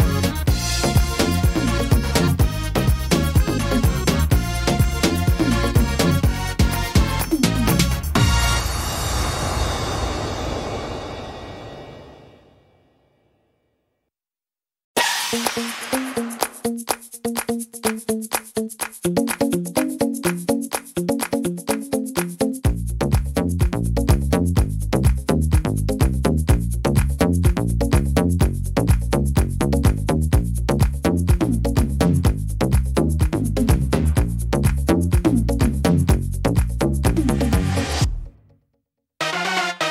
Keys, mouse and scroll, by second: 0.8 middle click, 1.8 click, 3.7 middle click, 4.7 alt+s, 6.6 alt+s, 9.3 middle click, 10.0 scroll up 1, 10.7 middle click, 12.3 s, 16.4 right click, 16.9 shift+right click, 17.8 click, 20.0 click, 21.5 click, 23.0 middle click, 23.3-23.7 scroll down 5, 23.9 middle click, 24.2 scroll down 1, 24.6 middle click, 24.9-25.4 scroll up 3, 25.4 middle click, 26.1 right click, 26.8 shift+right click, 27.2 shift+right click, 27.6 right click, 28.0 shift+right click, 28.3 shift+right click, 28.7 right click, 29.3 shift+right click, 29.9 shift+right click, 30.4 shift+right click, 30.9 shift+right click, 31.4 middle click, 31.7 scroll down 2, 32.1 middle click, 33.5 e, 34.8 middle click, 35.6 scroll down 1, 35.9 middle click, 36.4 scroll down 1, 36.8 middle click, 37.3-37.8 scroll up 4, 38.6 right click, 39.1 shift+right click.